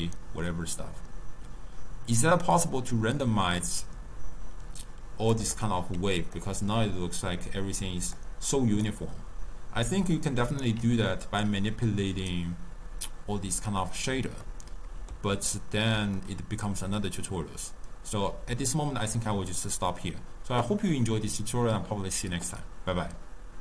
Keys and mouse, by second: 6.4-8.9 drag, 8.9-23.6 right drag.